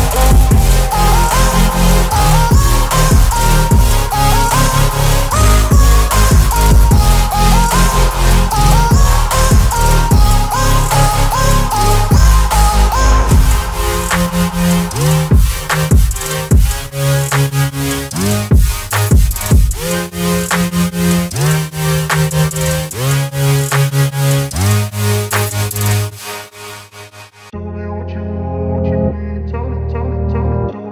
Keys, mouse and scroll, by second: 1.6-3.3 alt+drag, 4.9 alt+right click, 5.5 alt+click, 10.7 ctrl+alt+t, 12.0-14.9 alt+drag, 15.6-17.8 alt+drag, 26.6 Return, 28.1-30.2 shift+drag.